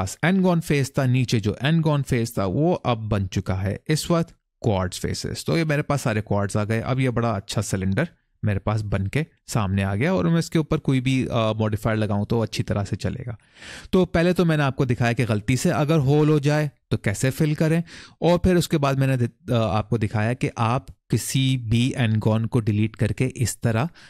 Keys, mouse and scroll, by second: 3.1 scroll up 1, 5.0 middle click, 6.6 click, 7.1 middle click, 8.2-8.5 scroll up 1, 8.7-9.7 scroll down 1, 9.8 shift+middle click, 11.8 middle click.